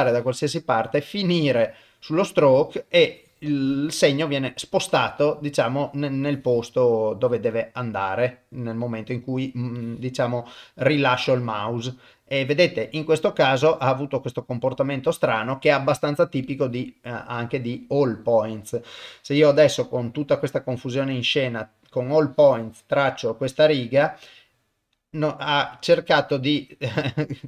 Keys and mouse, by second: 2.0-3.1 middle drag, 4.6-6.3 middle drag, 6.3-7.3 drag, 7.7-9.4 middle drag, 9.8 click, 11.5-14.9 middle drag, 15.7-16.8 drag, 16.8-18.2 middle drag, 19.8-21.0 middle drag, 22.2-23.4 drag, 24.4-27.4 middle drag.